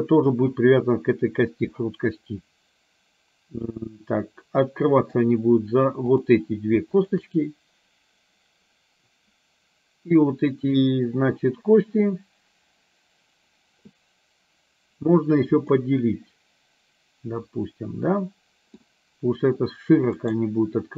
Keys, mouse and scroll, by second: 1.8-5.2 middle drag, 6.2 click, 7.1 shift+click, 15.9-18.9 middle drag, 20.3-20.9 right drag.